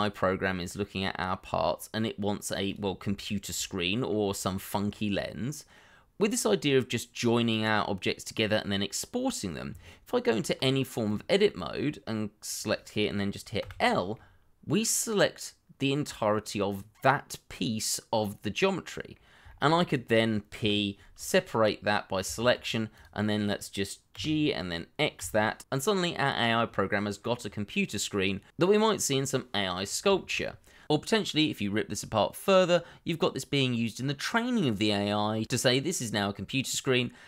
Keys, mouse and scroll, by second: 3.2 shift+middle click, 4.8-5.1 scroll up 1, 5.1 middle click, 6.1-7.4 scroll down 1, 8.9-9.8 scroll up 1, 9.8 Tab, 11.4 middle click, 13.6 l, 14.1 middle click, 19.4 shift+middle click, 20.5 p, 22.2 Tab, 24.1 Tab, 25.1 x, 26.3 middle click, 28.6 middle click, 30.7 shift+middle click.